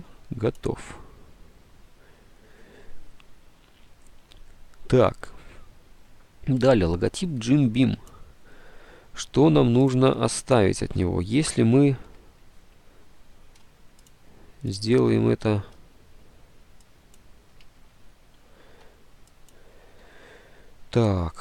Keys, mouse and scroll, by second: 18.3 ctrl+z.